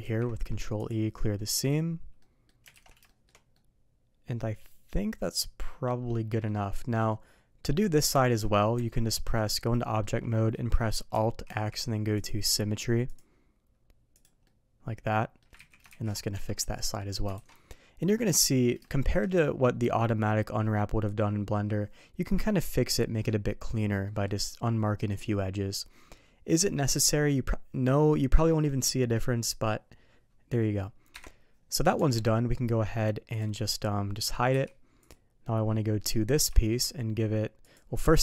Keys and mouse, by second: 0.0 ctrl+e, 1.3 middle click, 2.2 middle click, 2.7 alt+a, 3.0 middle click, 3.5-6.4 middle drag, 7.1 middle click, 8.2 shift+middle drag, 8.7 Tab, 9.1 middle click, 9.8 middle click, 11.4 alt+x, 12.1-13.3 drag, 14.1 click, 14.4-15.4 middle drag, 15.6 ctrl+z, 16.3 Tab, 16.6 ctrl+shift+middle click, 17.3 alt+a, 17.5-18.0 ctrl+shift+middle drag, 18.8 shift+middle click, 24.0 middle click, 31.1 KP_Divide, 31.9 Tab, 34.5 h, 35.0 click, 36.0 middle click, 36.5 shift+middle drag, 37.6 click.